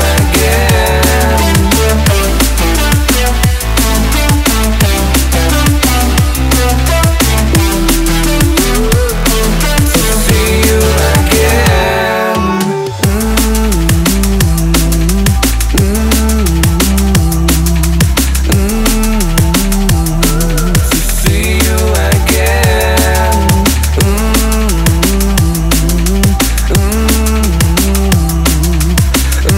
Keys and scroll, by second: 1.8 ctrl+t, 4.2 ctrl+t.